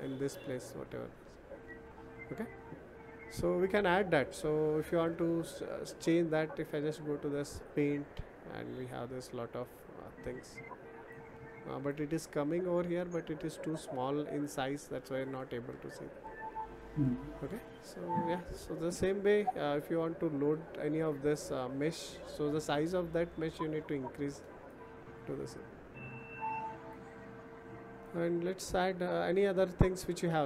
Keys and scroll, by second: 14.8 ctrl+z.